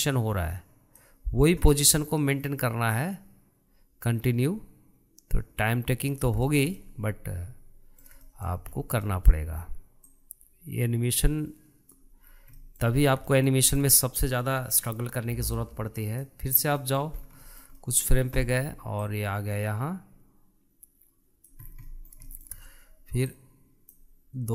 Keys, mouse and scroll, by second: 4.0 click, 7.2-7.6 scroll down 1, 7.6-9.8 shift+middle drag, 9.8-10.2 scroll up 1, 10.2-11.2 middle drag, 11.2 click, 13.3-13.7 scroll down 1, 13.7-14.1 middle drag, 14.1 scroll up 2, 14.4-16.7 shift+middle drag, 16.7 click, 17.9 middle click, 18.3 scroll up 1, 18.6-20.1 shift+middle drag, 20.1 click, 22.7 scroll down 3, 23.0-24.5 middle drag.